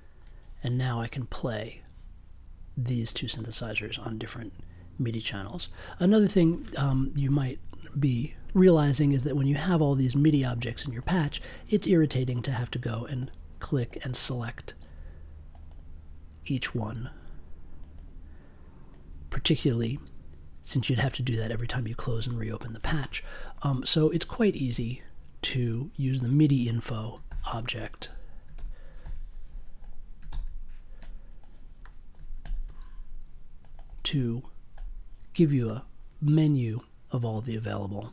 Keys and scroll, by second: 27.2 super+c, 28.5 super+v, 29.0 super+c, 30.3 super+v.